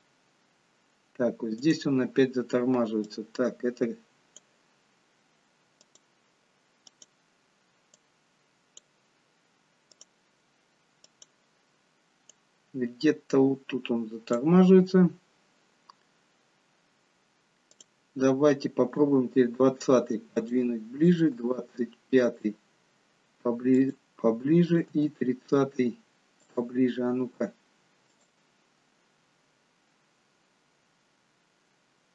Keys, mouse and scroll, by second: 3.1 click, 17.8 click, 19.1 g, 21.1 click, 21.4 g, 24.7 click, 24.9 g, 28.1 click.